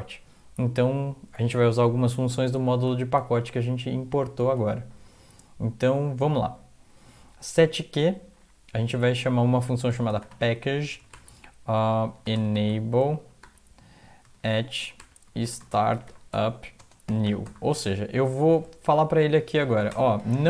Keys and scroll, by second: 3.3 alt+Tab, 9.9-17.5 typing, 17.9 End, 19.9 shift+Home.